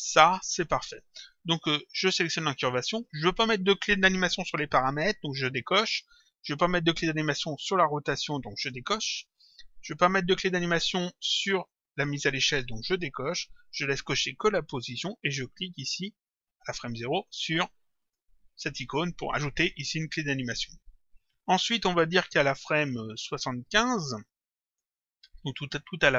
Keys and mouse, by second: 2.6 click, 4.6 click, 8.6 click, 12.9 click, 18.1 click, 24.7 click.